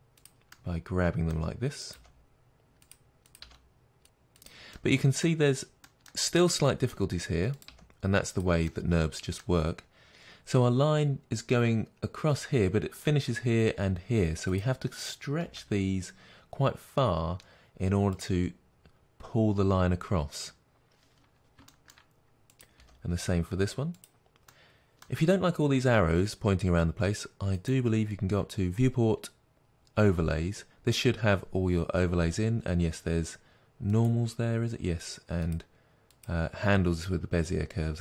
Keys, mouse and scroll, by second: 0.3 click, 0.6-2.0 middle drag, 2.0 click, 2.1 g, 2.8 click, 2.9 g, 3.3 click, 3.7 g, 4.4 click, 4.7-7.5 middle drag, 5.4 scroll up 1, 7.5 click, 7.6 g, 8.3 click, 8.6-10.1 middle drag, 10.1-14.5 drag, 15.4 g, 18.3 click, 21.1 scroll down 1, 21.6 shift+middle click, 22.5 click, 22.7 g, 23.9 click, 24.5-33.8 middle drag, 33.8-38.0 drag.